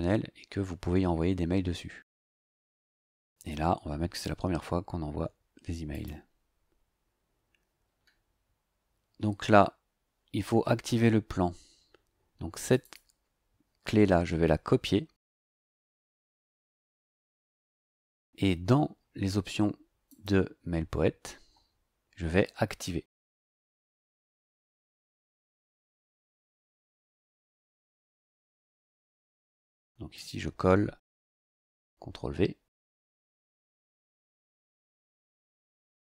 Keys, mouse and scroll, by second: 4.1 click, 5.9 click, 12.6 click, 16.5 click, 20.0 click, 25.0 click, 29.2 click, 30.1 click, 31.6 ctrl+v, 33.0 click.